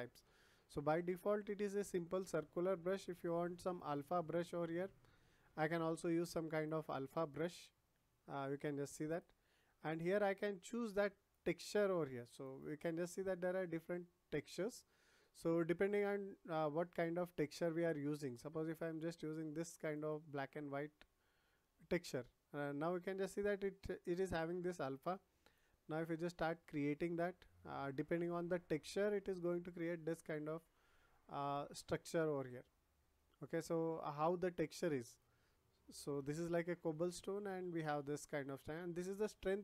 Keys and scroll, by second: 9.7 ctrl+z.